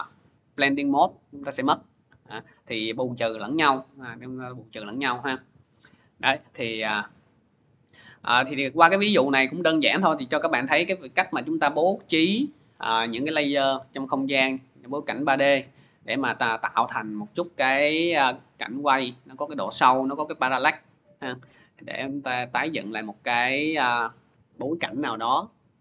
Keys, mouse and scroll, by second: 4.0 F4, 6.2-6.5 scroll, 6.8 scroll, 6.9 click, 7.5 click, 22.5-25.8 drag.